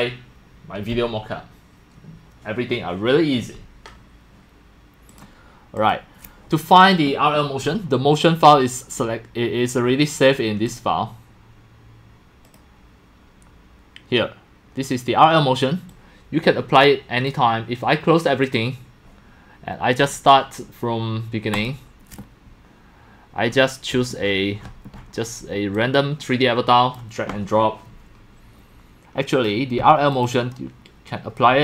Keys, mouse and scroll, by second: 0.0-31.6 typing, 5.1 click, 5.8 click, 10.7 click, 12.4 click, 15.9-17.3 drag, 20.0 click, 21.5 click, 23.5 middle click, 23.6 middle click, 25.7 click, 28.6 click, 29.3 click, 30.1 click.